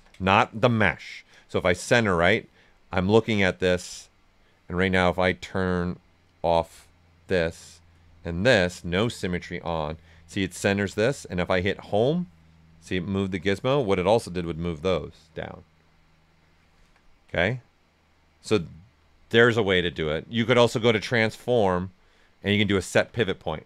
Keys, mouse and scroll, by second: 1.3 click, 2.5-5.0 right drag, 5.0 click, 10.0-11.8 right drag, 11.8 click, 12.5-14.3 right drag, 14.3 click, 16.7 ctrl+z, 17.4 right click, 19.1 alt+right click, 20.9 click.